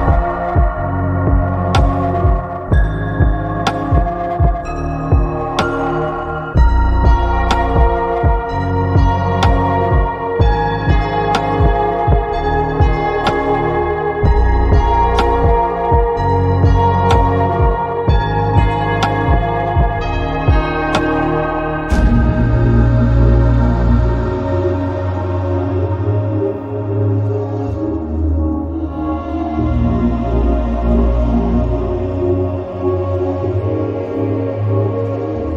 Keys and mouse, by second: 1.0 click, 1.8 click, 7.9 click, 8.6 click, 13.6 click, 19.3-23.8 drag, 26.5 click, 27.8 click, 29.8 click, 35.0-35.5 drag.